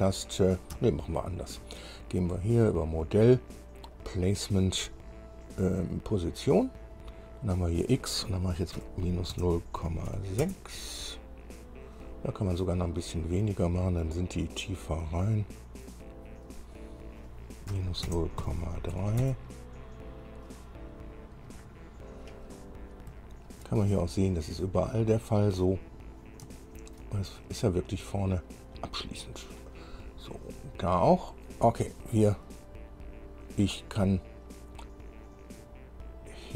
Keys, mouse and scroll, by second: 1.0 Escape, 2.4 click, 4.2 click, 7.2 click, 7.9 click, 9.0 KP_Subtract, 9.6 KP_0, 10.0 KP_Decimal, 10.6 KP_6, 17.0 click, 17.9 KP_Subtract, 18.3 KP_0, 18.6 KP_Decimal, 19.2 KP_3, 19.4 KP_Enter, 21.5-21.8 scroll up 1, 22.3-23.1 scroll down 2, 23.4 shift+middle click, 24.2-24.6 shift+scroll up 2, 25.0-25.3 scroll up 2, 26.4-26.7 scroll down 2, 26.8 shift+middle click, 27.6 shift+scroll up 3, 28.7 scroll down 2, 29.3 scroll down 2, 30.5-31.0 scroll up 2, 31.4 scroll down 2.